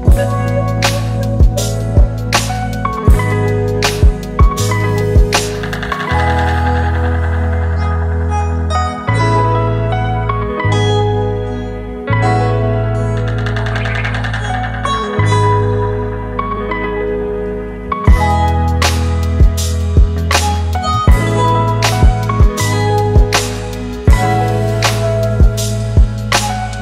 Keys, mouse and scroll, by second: 3.7 ctrl+-, 3.9 ctrl+-, 4.3 ctrl+-, 8.8 ctrl+z, 13.2 scroll up 1, 21.0-21.4 scroll down 1, 21.4-22.0 scroll up 1, 24.5-26.8 scroll down 1.